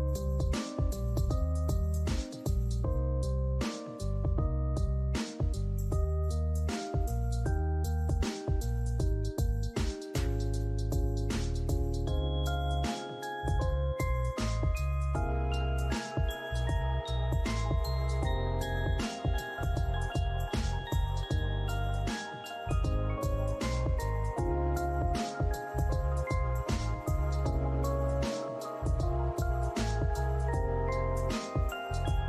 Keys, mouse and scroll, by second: 2.0 double click, 2.4 alt+click, 3.6 alt+click, 4.7 alt+click, 6.5 alt+click, 8.5 ctrl+z, 9.4 alt+click, 14.2 alt+middle click, 14.6 alt+click, 17.9 ctrl+z, 19.6 typing, 20.0 Return, 20.9 alt+click, 22.1 ctrl+z, 30.7 alt+click.